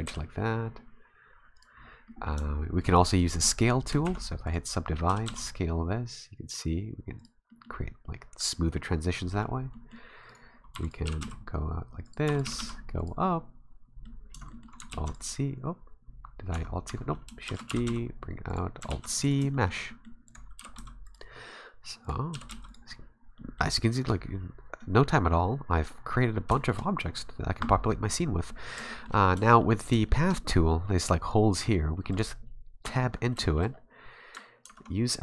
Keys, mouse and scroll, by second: 0.1 g, 1.8 scroll down 3, 2.0 scroll up 1, 2.1 middle click, 3.1 right click, 3.6 shift+right click, 4.0 w, 5.1 s, 7.5 middle click, 7.9 scroll up 1, 8.4 scroll down 4, 8.7 middle click, 9.7 middle click, 10.3 right click, 10.7 e, 11.1 g, 12.3 e, 12.4 g, 13.2 middle click, 14.2 scroll down 1, 14.3 Tab, 14.5 middle click, 14.9 alt+c, 16.5 Tab, 16.9 Tab, 17.5 shift+d, 17.7 g, 18.9 alt+c, 19.5 shift+middle click, 19.9 middle click, 20.3 right click, 20.6 g, 22.0 right click, 22.3 g, 23.6 middle click, 24.8 middle click, 26.6 shift+middle click, 27.6 scroll down 1, 28.0 middle click, 28.7-29.3 scroll up 5, 28.9 shift+middle click, 29.4 shift+middle click, 30.1 shift+middle click, 32.1 right click, 32.8 Tab, 33.4 shift+middle click, 33.7-34.3 scroll up 3, 34.6 ctrl+Tab.